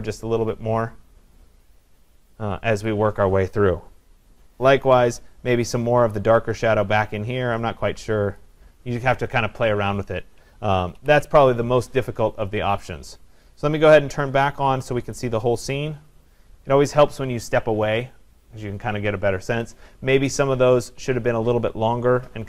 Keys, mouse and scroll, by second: 2.9 click, 8.4 click, 11.0 ctrl+0, 14.5-15.6 drag, 17.0 click.